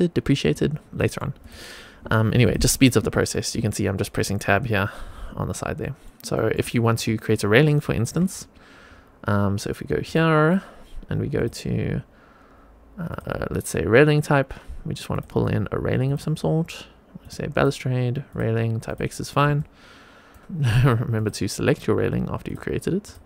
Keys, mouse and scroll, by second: 0.3 Tab, 0.9 middle click, 1.3 click, 2.3 click, 2.9 Tab, 3.5 Tab, 5.7 middle click, 6.2 shift+middle click, 6.6 middle click, 7.0 shift+right click, 9.9-19.1 drag, 19.5 shift+right click, 20.4 shift+middle click, 20.4 shift+a, 20.4 x, 21.1-22.4 drag.